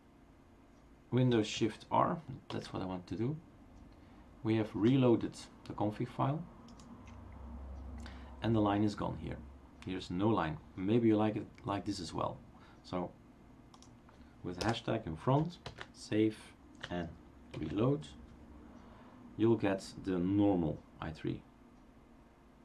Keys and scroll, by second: 2.9 shift+super+r, 14.7 BackSpace, 15.6 ctrl+s, 17.6 shift+super+r.